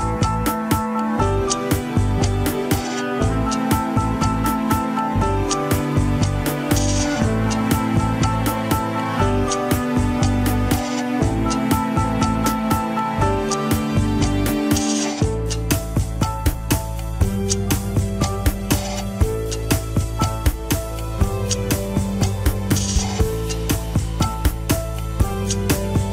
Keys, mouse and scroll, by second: 0.6 middle click, 0.8 scroll up 1, 1.9 shift+click, 2.9 shift+click, 3.2 shift+click, 3.7 scroll down 3, 3.9 middle click, 4.7 g, 5.7-8.1 middle drag, 8.1 scroll down 2, 8.7-9.3 scroll up 4, 10.1-11.3 drag, 11.8 scroll up 1, 12.0-13.4 middle drag, 13.4 scroll up 1, 14.0 g, 22.3 Tab, 22.7 middle click, 23.3 click, 24.0 ctrl+Tab, 24.5 click, 24.7 alt+z, 25.2 click, 26.0 click.